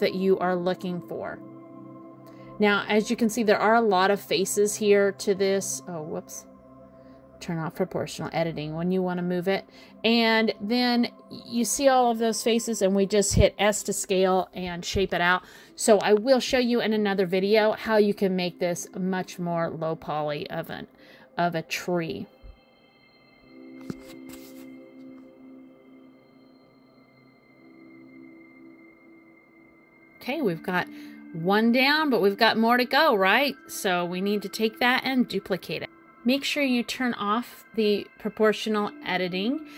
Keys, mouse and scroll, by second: 0.2 a, 2.0 click, 4.1 click, 5.2 click, 6.0-6.4 scroll down 1, 6.4 middle click, 7.4-7.8 scroll down 3, 7.8 middle click, 9.2 s, 10.2 middle click, 12.0 middle click, 12.9 click, 13.2 middle click, 14.2 click, 15.5 g, 17.0 middle click, 18.0-18.3 scroll up 3, 18.4 middle click, 19.6 g, 21.7 click, 21.9 g, 23.6 click, 23.8 g, 24.6 middle click, 26.2 middle click, 27.6 scroll up 1, 27.7 scroll down 3, 28.0 middle click, 28.3 scroll up 1, 28.5 scroll down 2, 28.7 middle click, 31.5 a, 34.5 shift+d, 35.8 click, 36.3 click, 37.4 a, 39.2 shift+d.